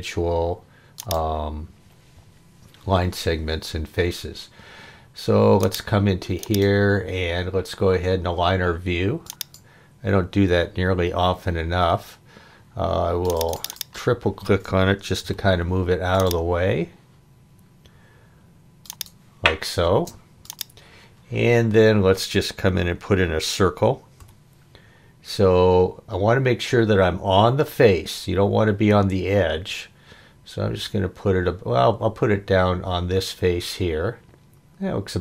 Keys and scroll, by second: 15.2 m, 19.8 space.